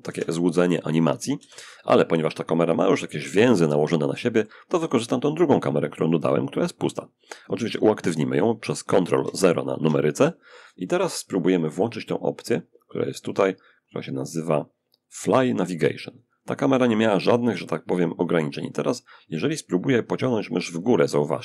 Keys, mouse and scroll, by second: 0.6 Escape, 1.4-4.2 drag, 4.2 middle click, 4.2-4.9 scroll down 1, 5.2 click, 8.5 ctrl+0, 10.8 click, 15.4 click.